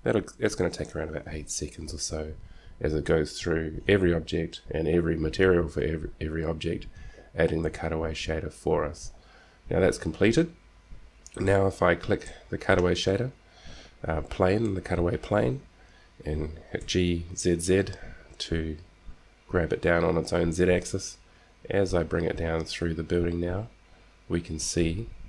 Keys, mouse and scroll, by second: 11.6-12.7 drag, 12.7-14.5 middle drag, 17.2 g.